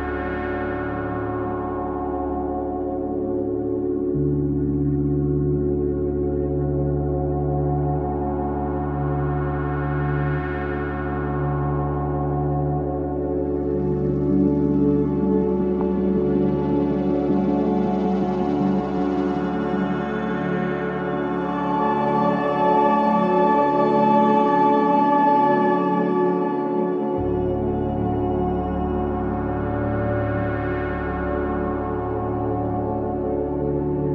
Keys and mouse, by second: 0.8 Tab, 13.3-14.5 middle drag, 15.1 middle click, 15.8 KP_1, 19.3-21.5 drag, 22.7 z, 25.5-27.6 drag, 25.9 s, 27.7-29.8 drag, 29.3 Tab, 29.8 Tab, 30.4 z.